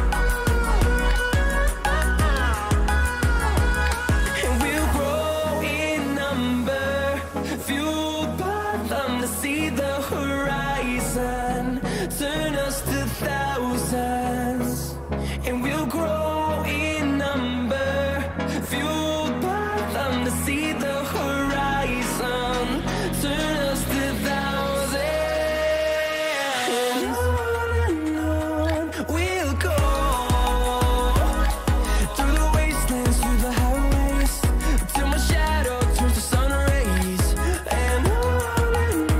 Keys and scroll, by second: 21.6 2, 22.1 0, 23.8 BackSpace, 36.7 v.